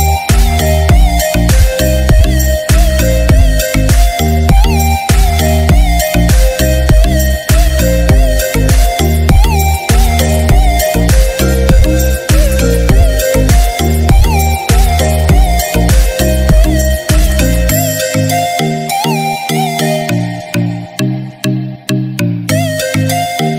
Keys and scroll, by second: 9.1 ctrl+m.